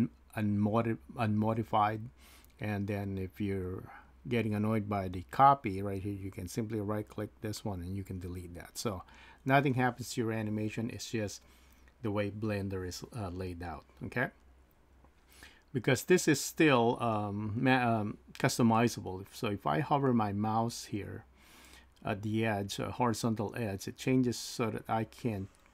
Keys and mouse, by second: 7.1-8.9 right drag.